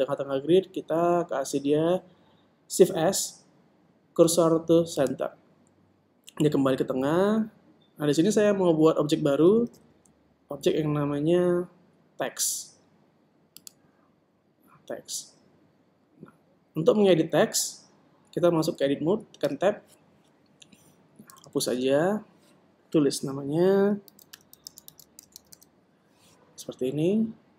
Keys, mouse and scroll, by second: 0.1 shift+s, 10.6 shift+a, 20.4 Tab, 22.3 BackSpace, 22.7 BackSpace, 25.1-26.5 typing.